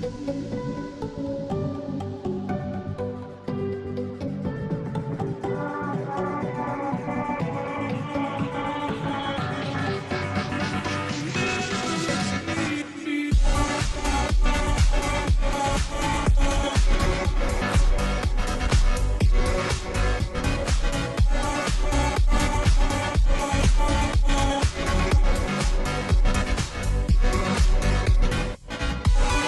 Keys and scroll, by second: 1.3 Delete, 2.5 ctrl+s, 19.7 ], 20.1 ], 20.4 ], 20.8 ], 26.7 [, 26.9 [.